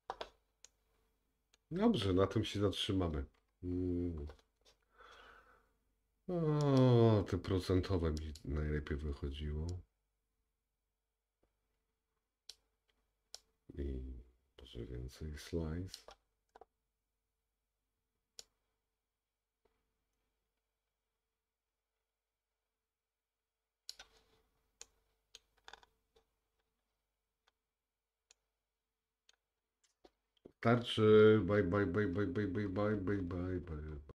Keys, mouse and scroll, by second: 0.7 middle click, 6.7 click, 13.4 click, 24.9 middle click, 25.7-26.2 scroll up 4, 27.0-27.3 scroll down 2, 28.4 middle click, 29.7-30.1 scroll down 1, 31.4 click.